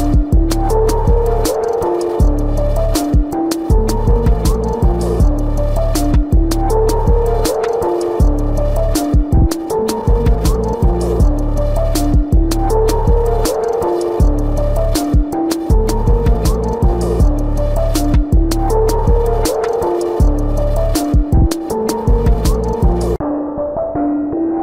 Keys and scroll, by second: 0.9 space, 6.2 space, 7.7 space, 9.2 space, 13.3 space, 14.2 ctrl+=, 16.0 ctrl+=, 21.0 ctrl+=.